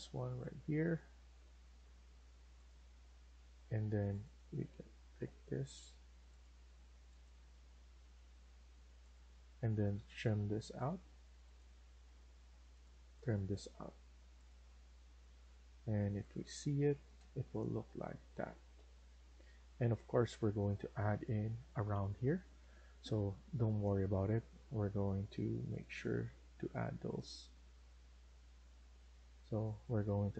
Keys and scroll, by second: 1.3 Escape, 4.0 Escape, 9.1 Escape, 9.3 Escape, 9.6-10.4 typing, 16.9 Escape, 17.1 Escape, 27.1 Escape.